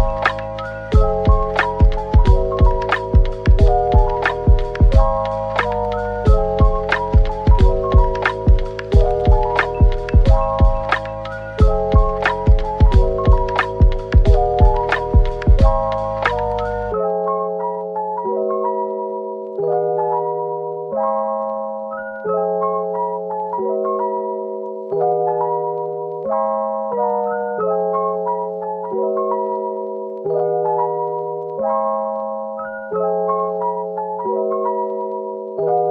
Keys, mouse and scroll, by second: 0.1-0.5 typing, 2.1-2.5 scroll down 1, 3.1 typing, 4.6-5.3 scroll down 1, 6.7 typing, 8.6 typing, 10.4 typing, 12.2 middle click, 13.0-13.9 typing, 16.6-17.4 typing, 17.6 double click, 18.1 middle click, 20.9 ctrl+z, 21.8 typing, 22.8 typing, 24.8 middle click, 26.5-27.4 typing, 29.0-29.7 scroll up 1, 30.0-30.7 typing, 31.3 middle click, 32.0-32.8 typing, 34.4-35.3 typing, 35.4 double click, 35.7-35.9 scroll down 1.